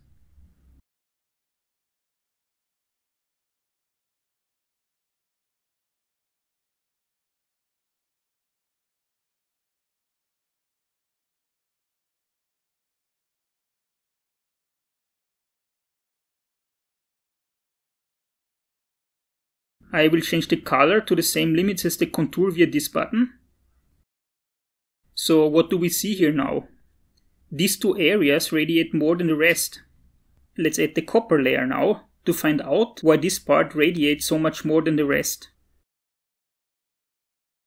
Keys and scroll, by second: 12.1 BackSpace, 12.8 8.